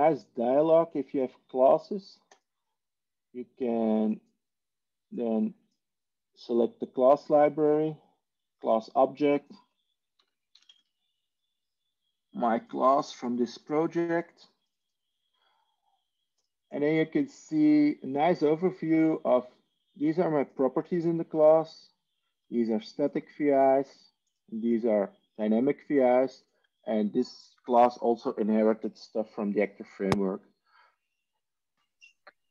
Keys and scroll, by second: 9.9-11.2 typing.